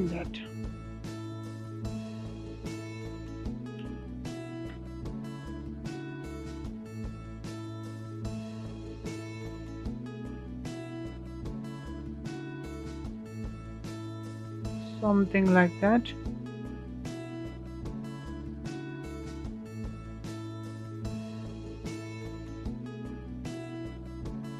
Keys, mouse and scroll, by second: 2.2-5.3 drag, 8.2-13.0 drag, 17.0-17.3 scroll down 4, 17.3-17.7 scroll up 5, 17.7-19.2 middle drag, 19.2-20.0 scroll up 2, 20.0-22.4 middle drag, 22.4-22.7 scroll down 3, 22.7-24.3 middle drag, 24.3 click.